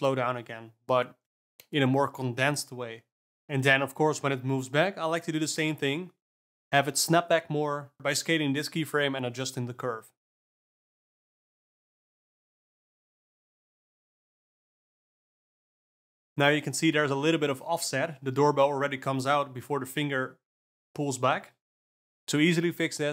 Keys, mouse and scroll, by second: 0.0-1.1 scroll up 4, 1.1 click, 1.5-2.4 scroll up 7, 2.4-3.3 scroll down 1, 3.3 click, 3.5 space, 5.5 space, 6.9-8.4 drag, 8.4 alt+a, 8.7 click, 9.6 s, 11.2 click, 11.5 space, 15.0 space, 15.4 s, 18.9 click, 20.5 shift+F12, 21.3 alt+a, 21.7-22.6 drag, 22.6 g.